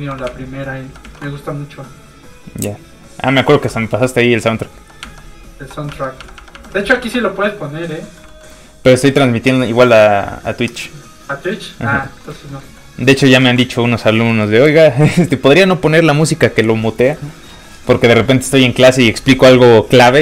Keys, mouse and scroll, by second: 0.1 alt+middle click, 0.2 alt+Tab, 7.8 Tab, 7.9 middle click, 8.2 shift+middle click, 12.0 shift+middle click, 12.5 shift+middle click, 12.6 middle click, 13.4 ctrl+s, 17.0 shift+s.